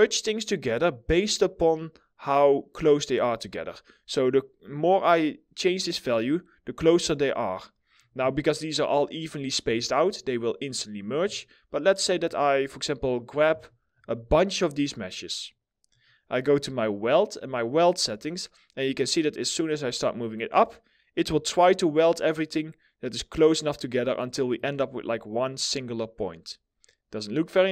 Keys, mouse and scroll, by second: 9.5 scroll down 1, 10.3 middle click, 10.4 scroll down 1, 11.0 alt+middle click, 13.2 alt+middle click, 13.6-15.6 scroll up 1.